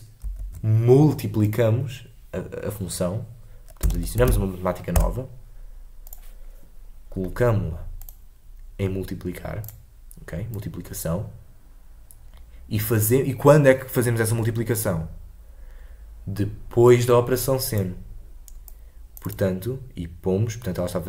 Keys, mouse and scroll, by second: 9.6-18.7 drag.